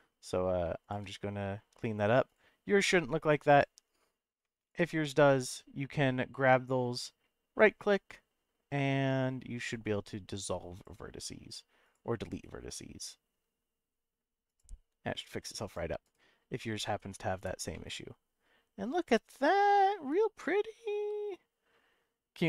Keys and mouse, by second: 0.9 click, 2.3 click, 3.5 click, 4.7 shift+click, 7.8-10.8 right drag, 11.8 click, 12.5-14.6 right drag, 15.6 click, 16.2-17.4 right drag, 17.7-21.7 middle drag.